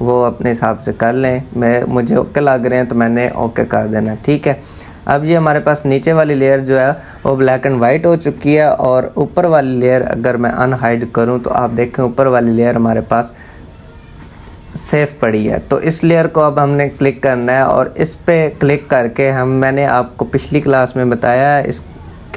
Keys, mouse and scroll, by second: 2.9 click, 10.1 click, 15.6 click.